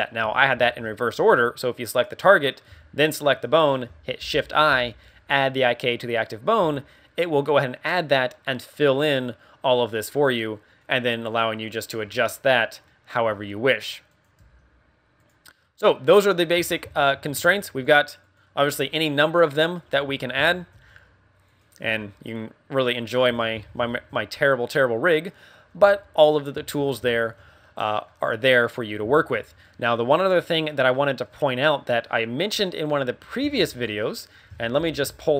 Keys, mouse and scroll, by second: 0.5 ctrl+z, 1.2 a, 1.8 right click, 3.0 shift+right click, 4.2 shift+i, 7.0 a, 7.4 right click, 10.8 click, 11.6 click, 12.0 scroll down 4, 12.3 middle click, 12.8 middle click, 13.2 scroll up 2, 14.1 right click, 14.3 g, 15.2 right click, 15.5 scroll down 2, 15.7 middle click, 16.5 KP_1, 16.9 shift+middle click, 17.3 a, 17.8 right click, 18.2 right click, 18.6 g, 19.5 right click, 19.8 KP_3, 20.3 z, 20.7 r, 21.5 right click, 21.8 r, 23.2 z, 23.3 right click, 23.5 KP_1, 23.8 shift+middle click, 24.6 middle click, 25.2 middle click, 25.3 shift+middle click, 25.7 z, 26.1 right click, 26.5 z, 27.1 shift+middle click, 27.5 middle click, 29.1 shift+middle click, 31.4 middle click, 31.9 middle click, 33.5 ctrl+w.